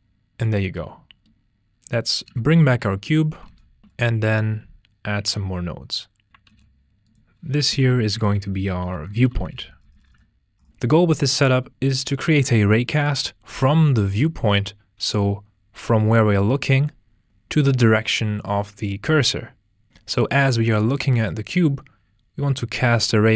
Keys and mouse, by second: 0.8 ctrl+z, 1.1 a, 1.3 x, 1.7 shift+a, 2.7 click, 3.7 ctrl+space, 5.2 ctrl+j, 5.8 click, 6.5 F2.